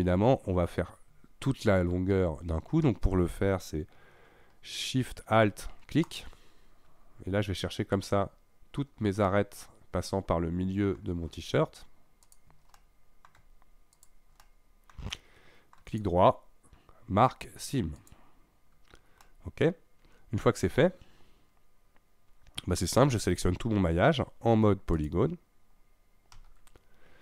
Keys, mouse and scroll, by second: 6.1 alt+shift+click, 8.0 alt+shift+click, 9.3-12.3 middle drag, 12.3 alt+shift+click, 12.8-14.0 middle drag, 14.0 alt+shift+click, 14.4 alt+shift+middle click, 15.1 middle click, 15.9 right click, 18.9 scroll down 2, 19.2-23.3 middle drag, 25.0 click, 26.4 a.